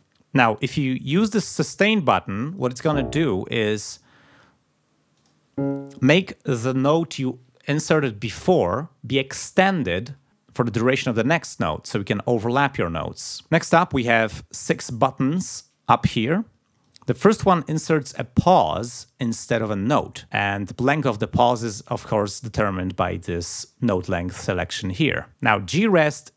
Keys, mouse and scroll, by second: 2.4 click, 3.8 click, 5.1 click, 16.8 click, 25.8 click.